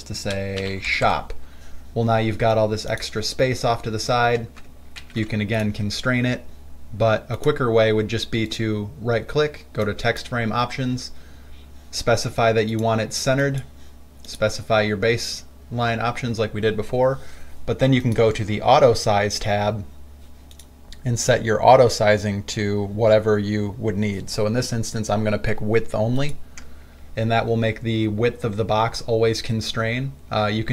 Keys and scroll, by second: 0.6-1.4 typing, 5.2 ctrl+alt+c.